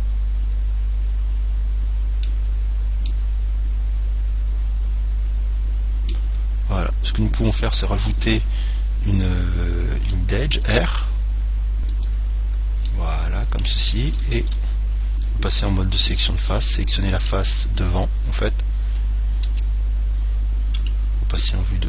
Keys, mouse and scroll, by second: 2.7-5.1 middle drag, 6.7-8.7 middle drag, 8.3 ctrl+r, 12.4 click, 13.2-14.9 middle drag, 14.7 ctrl+Tab, 16.5 right click, 17.0-18.9 middle drag, 19.8 KP_3, 21.1 KP_1.